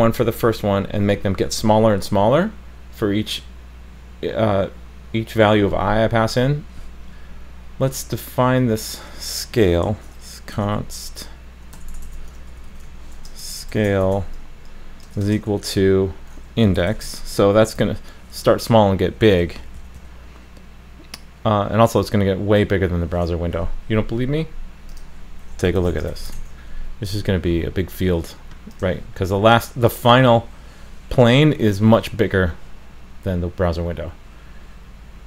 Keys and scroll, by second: 26.3 super+s.